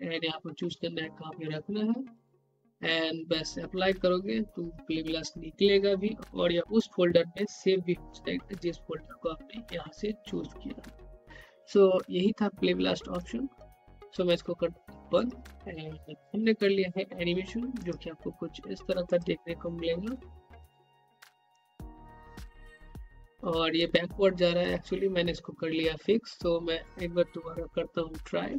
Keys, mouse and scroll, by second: 2.1 click, 12.7-17.2 drag, 17.8 click, 24.8 click.